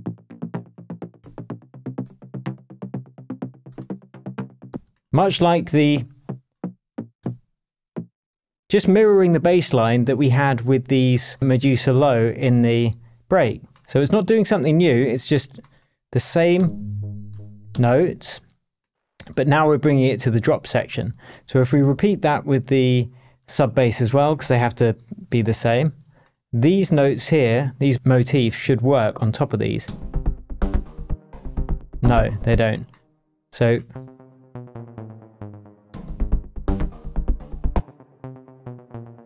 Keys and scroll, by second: 1.7 shift+super+j, 2.2 super+j, 3.1 super+d, 4.7 space, 6.5 Down, 7.2 Up, 7.9 Down, 8.7 shift+Down, 8.8 shift+Tab, 16.5 space, 17.7 space, 24.3 alt+super+d, 29.8 space, 31.0 space, 32.5 space, 34.5 Down, 35.9 space, 37.7 space, 38.6 Down.